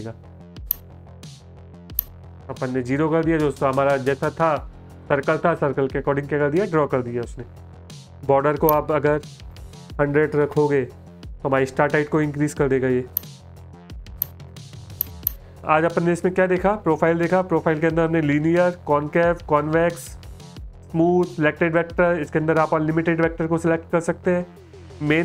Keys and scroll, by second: 8.9 BackSpace, 9.1 BackSpace, 9.3 BackSpace, 11.9 space.